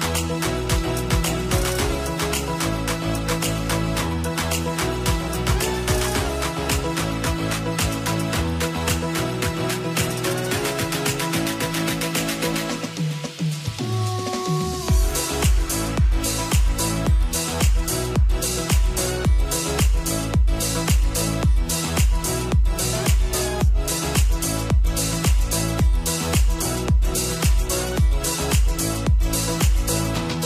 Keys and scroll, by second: 23.5 ctrl+t.